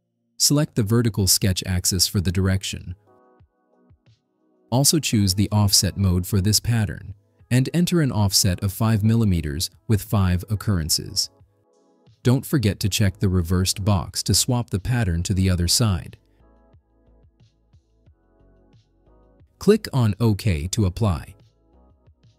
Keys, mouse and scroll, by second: 0.6 click, 3.3 click, 4.8 click, 6.9 click, 8.0 click, 9.0 5, 9.5 click, 10.2 click, 11.1 5, 11.5 click, 14.5 click, 21.7 click.